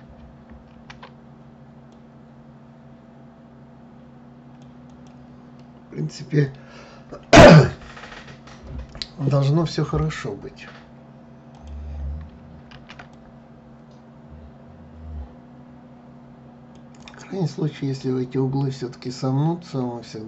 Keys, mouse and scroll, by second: 0.4 ctrl+r, 5.2-8.2 middle drag, 11.2 click, 12.4 ctrl+r, 18.7-20.1 middle drag, 20.1 click.